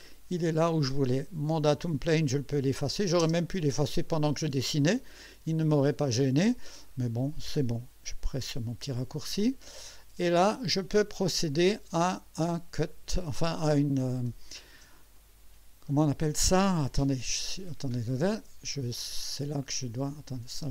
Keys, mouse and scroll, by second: 2.5 click, 3.2 space, 4.1-6.1 drag, 6.3 scroll up 2, 6.9 right click, 9.1-11.4 drag, 12.8 click, 15.2 click, 15.9 click, 17.3 click, 18.7 click, 20.4 click, 20.6 space.